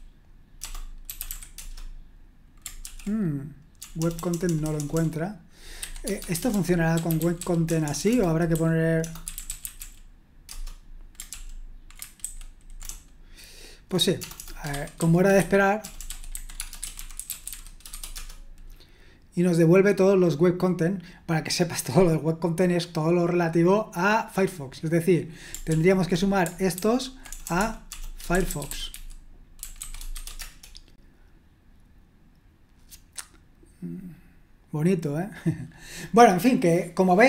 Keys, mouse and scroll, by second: 0.0-1.8 typing, 2.8 ctrl+p, 3.8-4.5 typing, 6.0-7.8 typing, 9.1-13.6 typing, 12.9 Return, 15.4 ctrl+p, 18.1 BackSpace, 25.7 ctrl+p, 26.8 ctrl+w, 27.3-30.6 typing.